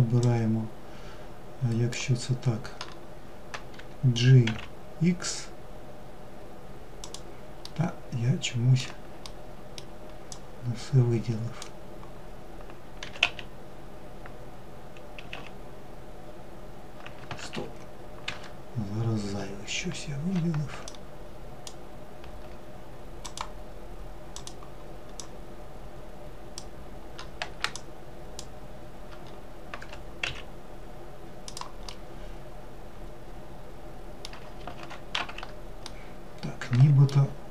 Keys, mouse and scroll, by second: 6.4-9.0 middle drag, 9.0 drag, 19.6 alt+click, 22.0 click, 23.1 click, 23.9 drag, 26.5 shift+click, 28.5 g, 30.6-33.5 middle drag, 33.5 alt+x, 33.9 alt+z, 34.6-37.5 middle drag.